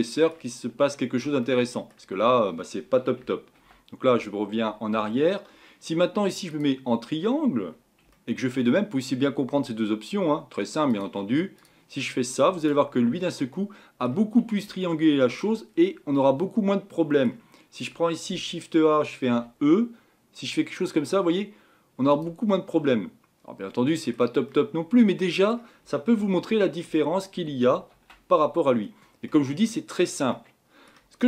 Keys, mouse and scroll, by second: 3.6 ctrl+z, 4.0 ctrl+z, 6.5 click, 7.1-8.1 scroll down 4, 8.1-11.6 shift+middle drag, 11.6-12.1 drag, 12.1-12.6 scroll up 4, 12.6 click, 13.1 Tab, 13.5-15.7 middle drag, 15.7-16.1 scroll down 2, 16.1-18.3 middle drag, 18.3 a, 19.3 e, 22.5-26.2 middle drag, 26.2 ctrl+z, 26.5 ctrl+z, 26.9 ctrl+z, 27.3 ctrl+z.